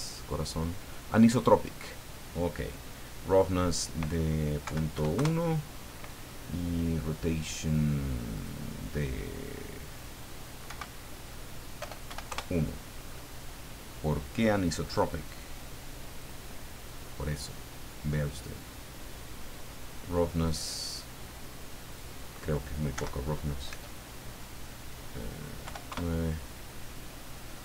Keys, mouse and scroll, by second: 1.3 click, 3.7 click, 4.6 Right, 4.9 KP_1, 5.1 KP_Enter, 8.3 click, 10.6 Right, 11.8 BackSpace, 12.0 KP_1, 12.3 KP_Enter, 13.1-13.4 scroll up 2, 14.9 click, 15.3 click, 16.2 click, 18.4-19.5 middle drag, 21.9 click, 23.0 Right, 23.7 BackSpace, 25.6 KP_9, 25.9 KP_Enter.